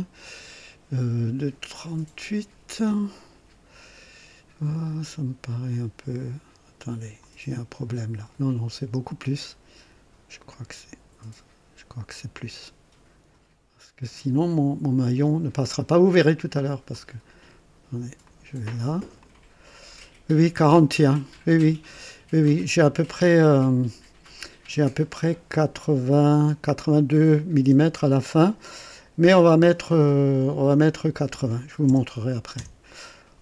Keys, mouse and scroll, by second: 7.2 click, 10.4-12.6 drag, 16.9 click, 18.2 click, 19.2 click, 31.2 KP_8, 31.8 KP_0, 32.5 Return.